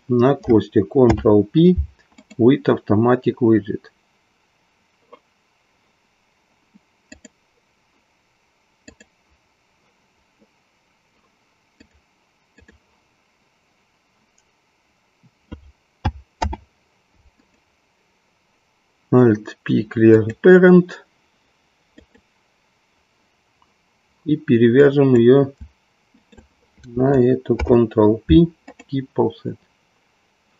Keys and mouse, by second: 1.0 ctrl+p, 7.1 click, 11.7-12.8 drag, 16.3 alt+p, 20.1 click, 24.8 click, 26.2 shift+click, 28.1 ctrl+p.